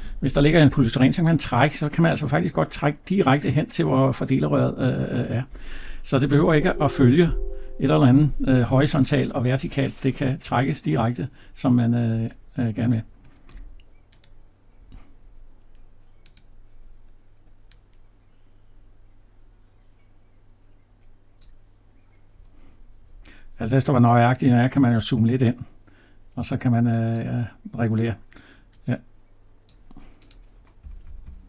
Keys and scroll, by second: 6.2 Escape, 14.8 Escape.